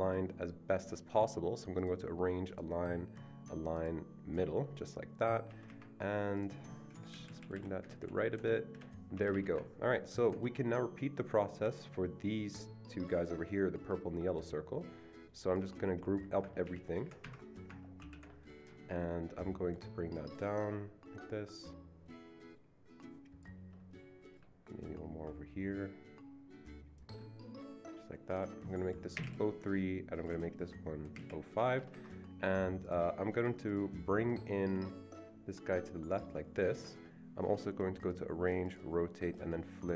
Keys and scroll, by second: 5.5 Escape, 5.7 Escape, 7.1 Escape, 7.1 Right, 7.2 Right, 7.4 Right, 7.5 Right, 8.0 Right, 8.3 Right, 9.2 Escape, 9.2 Right, 9.5 Escape, 16.6 ctrl+f, 17.2 Escape, 18.0 ctrl+g, 29.1 BackSpace, 29.2 BackSpace, 31.1 BackSpace, 31.2 BackSpace, 31.6 Escape, 31.8 Escape, 32.0 Escape.